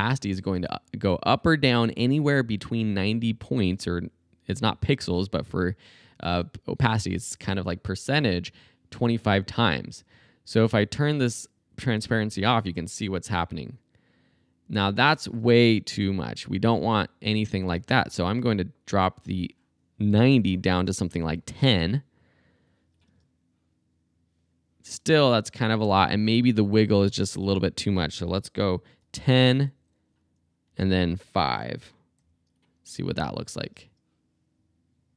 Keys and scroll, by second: 12.5 space, 17.8 space, 20.8 BackSpace, 21.1 i, 23.1 space, 25.0 space, 26.9 Right, 27.3 BackSpace, 28.3 i, 29.0 0, 29.5 Right, 30.7 BackSpace, 31.0 Delete, 32.2 5, 33.6 space.